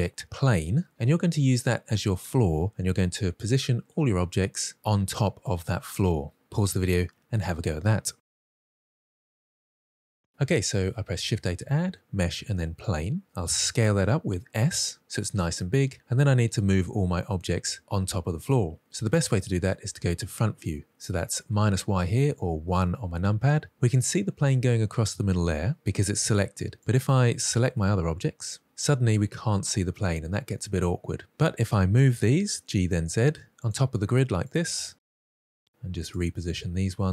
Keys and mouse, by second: 11.2 shift+a, 13.3 s, 14.9 click, 22.4 KP_1, 26.8-28.2 drag, 31.9 g, 32.4 z, 35.3 click, 35.6 click, 35.7 g, 35.9 click, 36.1 click, 36.2 g, 36.5 click, 36.8 click, 36.9 g.